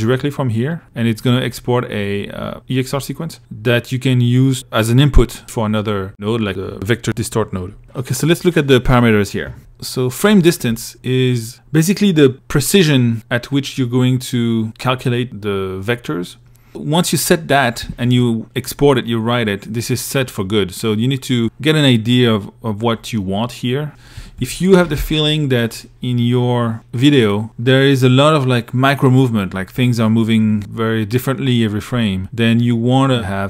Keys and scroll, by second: 23.6 2.